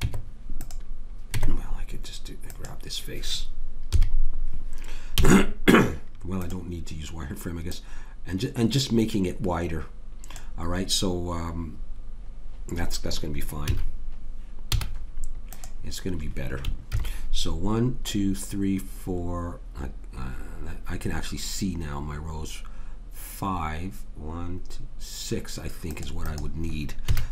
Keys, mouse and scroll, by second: 0.0 Tab, 1.4 Tab, 2.5 click, 3.9 KP_3, 5.2 z, 7.7 click, 13.6 a, 14.7 z, 17.0 ctrl+r, 27.1 a.